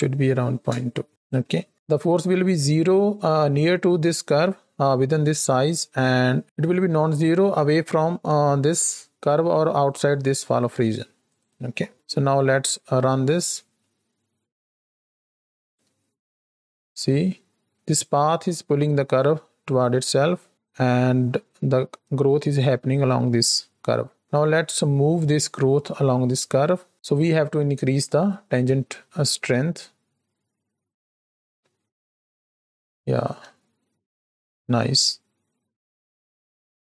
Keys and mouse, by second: 1.1 click, 1.6 middle click, 11.6 x, 11.9 middle drag, 12.9 space, 14.7-15.6 shift+drag, 17.7 space, 20.1 space, 24.2 space, 29.5 space, 33.7 shift+middle click, 36.1 middle click, 36.5 click.